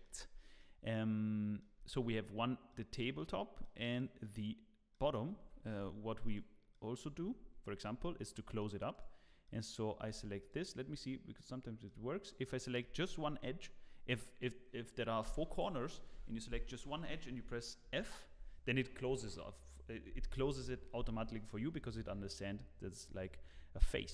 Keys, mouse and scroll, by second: 0.2 Tab, 0.6 middle click, 1.8 Tab, 2.3 scroll down 1, 3.6 scroll down 3.